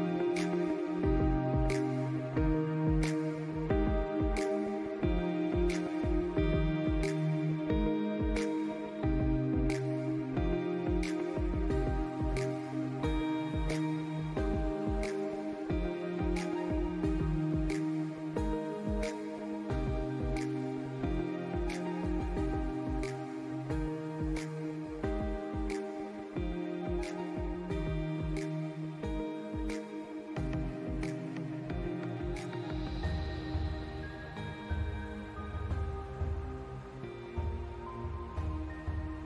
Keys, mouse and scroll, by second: 0.0 space, 0.3 alt+scroll up 1, 0.7-2.0 drag, 2.8 click, 2.9 scroll up 1, 3.2 click, 4.9-5.6 scroll up 4, 5.4 click, 5.7 click, 7.3-8.9 drag, 8.9 alt+scroll down 1, 9.0 alt+scroll up 1, 9.3-10.5 drag, 10.7 click, 11.1 click, 12.7 alt+scroll down 1, 13.6 alt+scroll up 1, 13.9 click, 15.1 alt+scroll down 2, 15.3 click, 15.8 scroll down 1, 16.0 alt+scroll up 2, 16.2 click, 16.5 click, 16.8 ctrl+s, 17.4 space, 17.5 click, 17.5 space, 17.9 scroll up 2, 18.1 scroll down 1, 19.7 ctrl+z, 20.0-22.9 drag, 26.4-28.9 drag, 29.9 scroll up 1, 33.8-37.9 drag, 38.7 click.